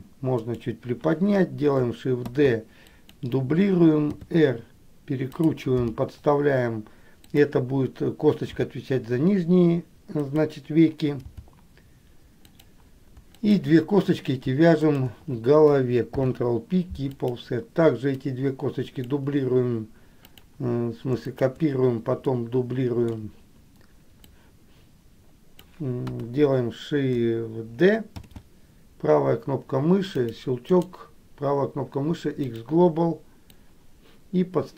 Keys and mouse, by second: 1.9 shift+g, 2.5 shift+d, 4.2 r, 13.2 shift+g, 13.6 shift+click, 15.0 shift+click, 16.2 ctrl+p, 18.4 click, 20.5 click, 21.4 shift+click, 22.5 middle click, 24.5-25.9 drag, 26.4 KP_1, 28.4 shift+d, 31.0-32.7 right drag, 33.8-34.7 drag.